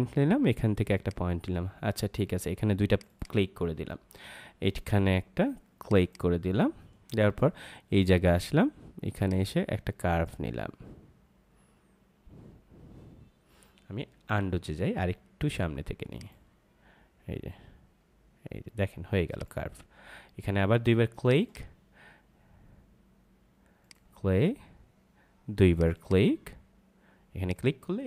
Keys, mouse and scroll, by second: 5.8 click, 9.1 click, 14.4 ctrl+z, 16.1 click, 19.2 click.